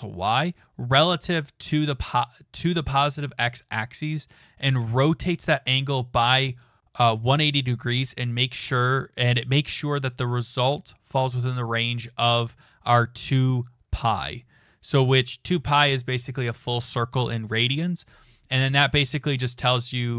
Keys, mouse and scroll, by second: 12.2 click, 14.8 click.